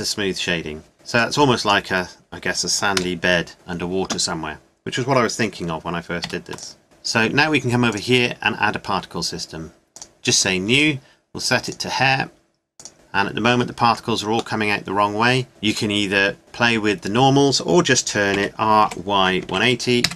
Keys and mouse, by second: 1.2-2.2 drag, 2.3 click, 3.0 KP_0, 6.2 ctrl+s, 7.9-10.0 drag, 18.3 r.